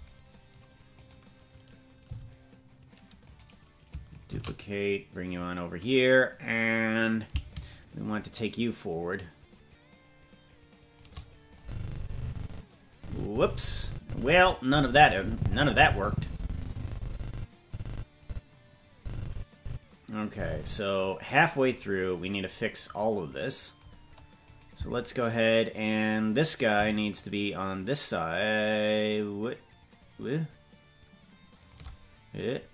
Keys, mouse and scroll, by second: 0.9 right click, 2.0 g, 4.3 shift+d, 7.6-11.0 shift+drag, 11.6-21.0 drag, 21.4-21.7 scroll down 4, 22.3-23.7 scroll down 3, 24.5 right click, 27.1-31.7 shift+drag.